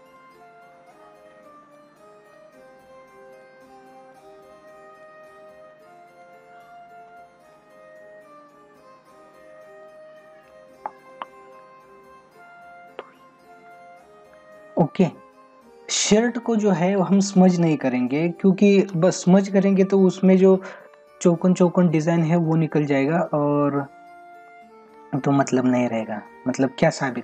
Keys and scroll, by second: 13.7 ctrl+=, 16.1 space, 22.4 space, 25.5 ctrl+-.